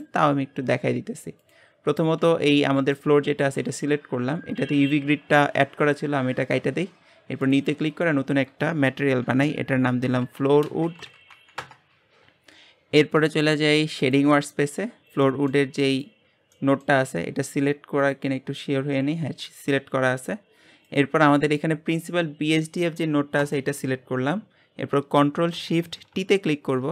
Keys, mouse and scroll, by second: 0.0 middle click, 0.8 scroll down 2, 1.4 click, 2.0 click, 2.2 g, 3.2 scroll up 2, 6.5-11.7 drag, 11.7 o, 14.0 click, 26.7 ctrl+shift+t.